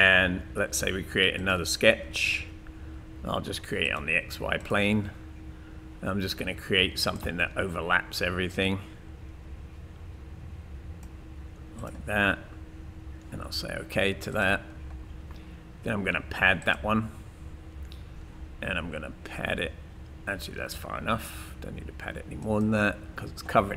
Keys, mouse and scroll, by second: 1.4 click, 7.1 click.